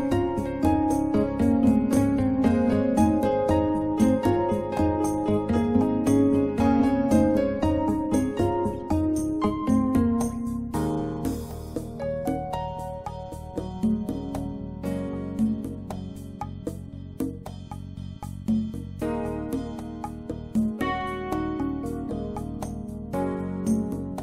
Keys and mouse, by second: 3.7 click, 15.1-15.5 drag, 16.2 click, 17.0 middle click, 23.4-24.2 drag.